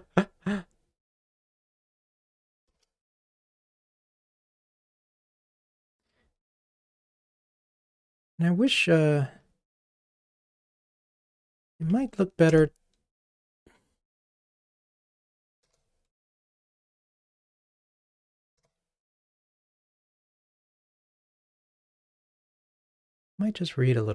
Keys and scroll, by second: 3.3 ctrl+r.